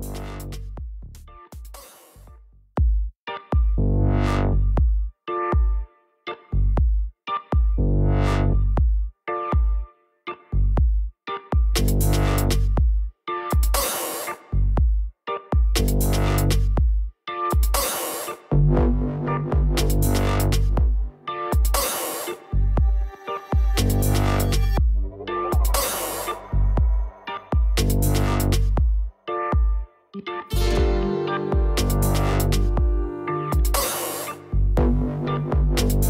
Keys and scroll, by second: 29.6 Return.